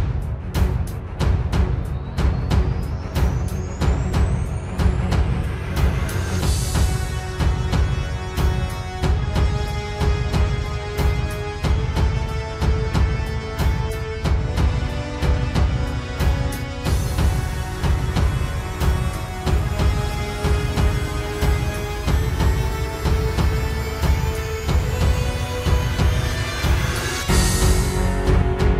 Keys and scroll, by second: 0.2 ctrl+j, 0.3 ctrl+space, 0.5 ctrl+t, 1.3 ctrl+z, 1.6 ctrl+t, 2.8 ctrl+space, 3.6 ctrl+e, 4.0 ctrl+space, 4.1 ctrl+s, 4.3 ctrl+space, 4.9 ctrl+space, 5.4 ctrl+z, 5.9 ctrl+space, 7.6 ctrl+j, 7.8 ctrl+t, 9.6 ctrl+space, 12.4 ctrl+space, 13.9 ctrl+space, 15.9 ctrl+space, 17.4 ctrl+t, 19.6 ctrl+z, 21.5 ctrl+space, 22.4 ctrl+z, 24.5 ctrl+space, 25.5 ctrl+space, 28.3 ctrl+d.